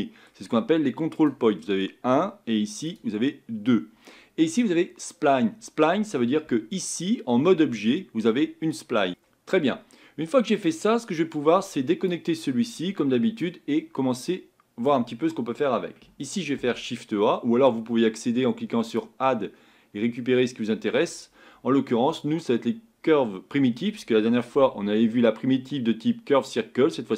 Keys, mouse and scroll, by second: 1.3 click, 3.0 click, 6.5 Tab, 7.1-12.1 middle drag, 12.1 click.